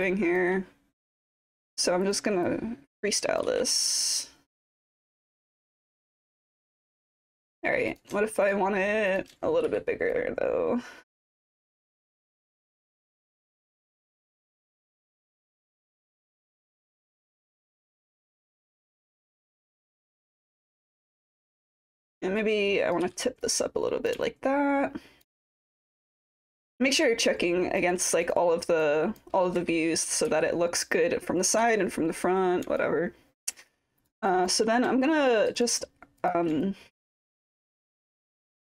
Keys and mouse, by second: 0.0 alt+click, 1.0 click, 2.5 click, 4.2 click, 4.7 middle click, 5.2 ctrl+z, 5.8 click, 5.8 middle click, 6.4-7.0 alt+drag, 7.2 alt+middle drag, 8.0 drag, 8.5 shift+click, 10.1-11.9 drag, 12.7 w, 13.1 w, 13.5-14.8 drag, 15.3 e, 15.9 click, 16.4 w, 17.2 click, 17.9 alt+click, 18.9 click, 19.4 click, 20.7-21.7 drag, 22.4 click, 23.1 w, 23.5 click, 24.2-25.2 alt+drag, 25.9 click, 26.7-27.8 alt+drag, 28.3 click, 28.8 click, 32.8 alt+click, 34.3 alt+click, 35.1 alt+click, 36.2 shift+click, 36.6-38.7 alt+drag.